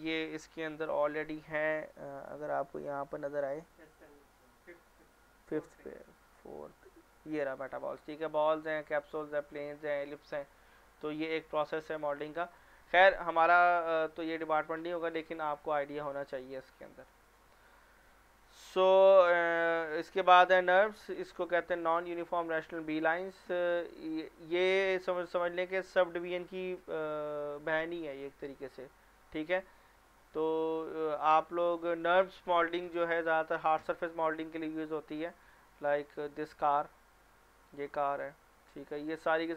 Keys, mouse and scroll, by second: 0.9 shift+a, 11.3 middle click, 11.7 scroll up 1, 12.2 click, 12.7 right click, 15.1 click, 15.9 scroll down 1, 16.2 middle click, 17.3 click, 22.0 ctrl+click, 30.3 scroll down 1, 32.2 scroll down 1, 33.4 scroll down 1, 35.2 click, 36.5 scroll down 1, 37.2 scroll down 1, 37.8 click, 38.7 click, 38.9 scroll down 1.